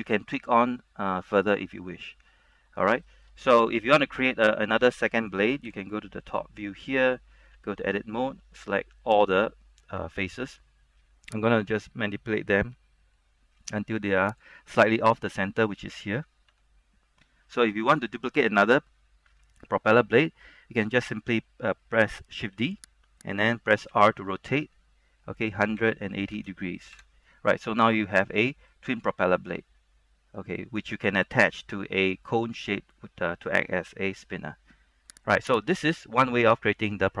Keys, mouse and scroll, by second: 3.3 shift+middle click, 3.8 Tab, 4.7 middle click, 5.8 KP_7, 6.5 shift+middle click, 7.7 Tab, 8.8 a, 11.8-15.3 drag, 16.6 Tab, 16.9-22.1 scroll down 1, 22.7 shift+d, 23.3 right click, 24.1 r, 25.9 KP_1, 26.2 KP_8, 26.5 KP_0, 27.1 KP_Enter, 28.4-30.9 middle drag, 30.9-31.3 scroll up 1, 31.3-35.4 middle drag, 35.4 right click, 36.7-37.2 scroll down 1.